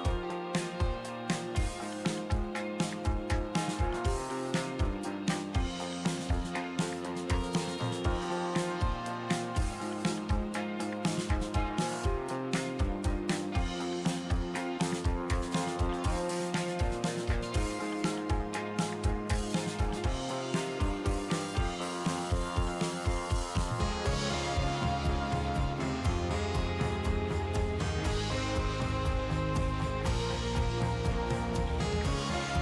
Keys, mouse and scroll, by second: 2.5 click, 14.2-19.9 drag, 19.9-20.5 scroll down 4, 20.5 middle click, 21.3-23.2 scroll up 10, 21.6 middle click, 23.2-29.7 shift+middle drag, 29.7-32.6 drag.